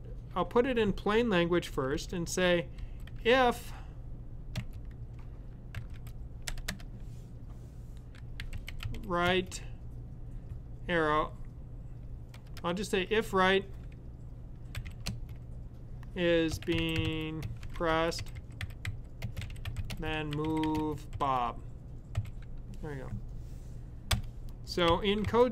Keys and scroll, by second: 1.4-2.9 typing, 5.5-6.6 typing, 7.9-9.4 typing, 10.5-11.1 typing, 12.2 typing, 14.4-21.9 typing, 24.5-25.5 typing.